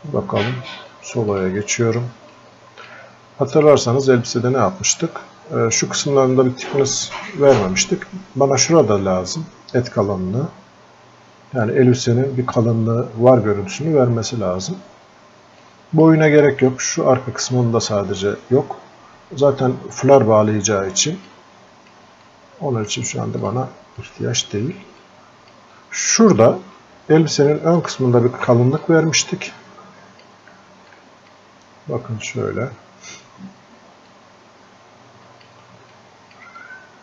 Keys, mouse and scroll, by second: 4.2-4.6 scroll up 1, 11.6 click, 15.6-18.4 drag, 21.3 click, 22.3 click, 23.5 click, 25.0-27.8 alt+drag, 28.8-30.9 drag, 30.9-34.1 alt+drag, 34.1-35.9 drag, 35.9 alt+click, 36.6-37.0 drag.